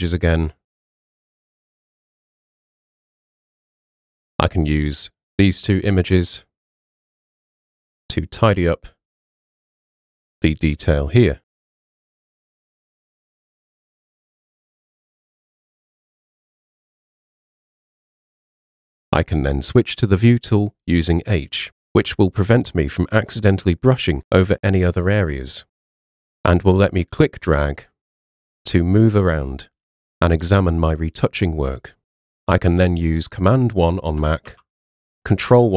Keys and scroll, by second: 20.0 h, 34.5 super+1.